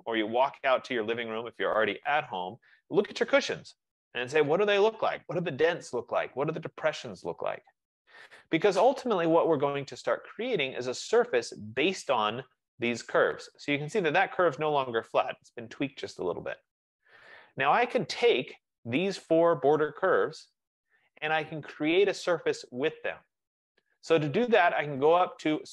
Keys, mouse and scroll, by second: 9.9-15.0 drag, 17.4 right click, 19.1 click, 19.9 click.